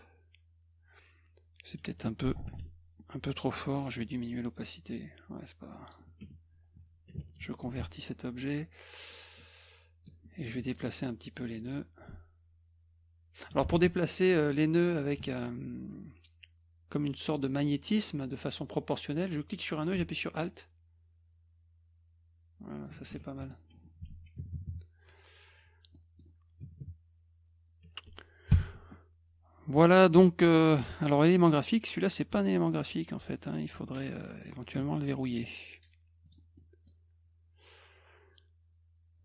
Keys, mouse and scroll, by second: 2.5 ctrl+shift+f, 4.0 click, 7.7 ctrl+shift+c, 9.4 click, 10.5 shift+click, 11.3 shift+click, 12.1 alt+click, 13.7 ctrl+z, 14.2 click, 15.5 shift+click, 19.4-22.9 drag, 23.1 F1, 23.4 click, 24.1 ctrl+s, 26.0 middle click, 28.5 ctrl+shift+l, 31.2 click, 34.7 click, 36.3 click, 36.6 middle drag.